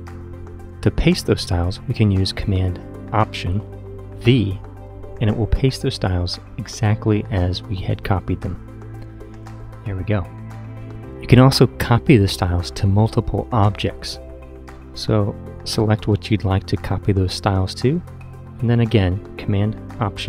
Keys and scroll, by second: 8.4 alt+super+v.